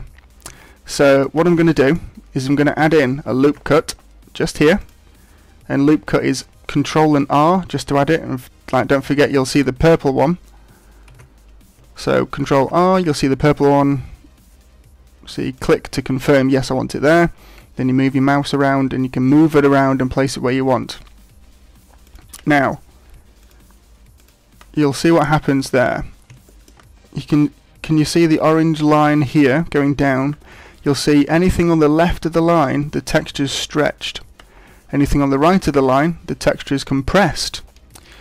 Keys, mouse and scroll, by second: 0.9 shift+middle click, 1.8 shift+middle click, 3.4 ctrl+r, 9.6 right click, 11.1 ctrl+z, 12.6 ctrl+r, 23.4 click, 25.9 scroll up 4, 26.4 shift+middle click.